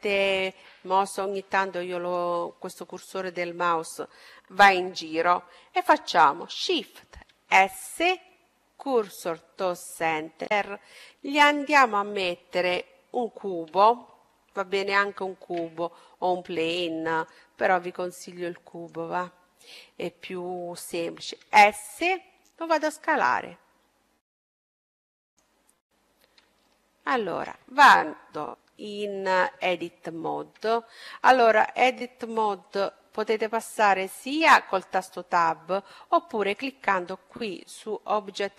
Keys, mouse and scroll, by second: 0.3-5.1 drag, 7.1 shift+s, 10.6-12.8 middle drag, 15.1 shift+a, 21.3 s, 25.7-28.3 middle drag, 30.1 Tab, 32.5-34.2 drag, 37.1-38.5 drag.